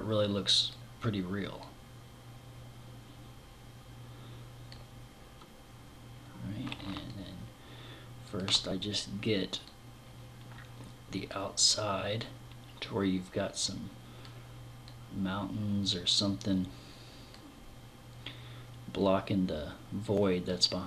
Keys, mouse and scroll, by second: 1.0 click, 6.5 middle click, 9.1 click, 11.6 click, 14.3 click, 18.4 click.